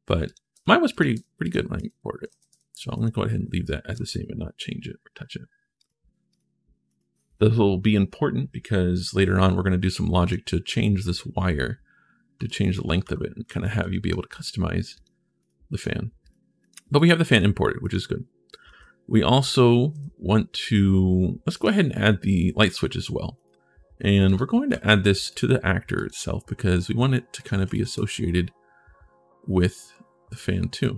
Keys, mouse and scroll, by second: 0.0 click, 0.7 click, 1.2 click, 2.1 ctrl+a, 2.7 click, 3.4 right click, 3.7 ctrl+shift+s, 6.1 click, 6.6 click, 10.0 click, 12.2-13.3 right drag, 12.5 d, 13.2 a, 13.6 a, 14.7 click, 15.2 click, 15.6 click, 16.0 click, 16.4 click, 16.7 click, 17.1 click, 17.6 click, 18.2-20.2 typing, 18.3-20.3 right drag, 21.3 click, 23.1 click, 24.0 click, 24.5 ctrl+shift+s, 25.0 click, 25.7 click, 27.1 click.